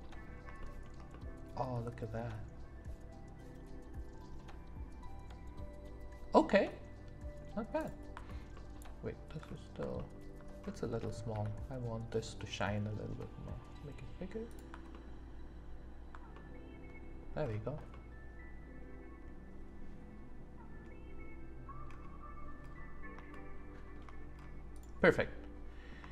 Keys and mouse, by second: 0.6 shift+middle click, 1.1-7.4 middle drag, 7.7 click, 11.3 s, 16.3 middle click, 17.9-20.7 middle drag, 23.3 shift+middle click, 24.7 click, 25.2 click, 25.2 right click.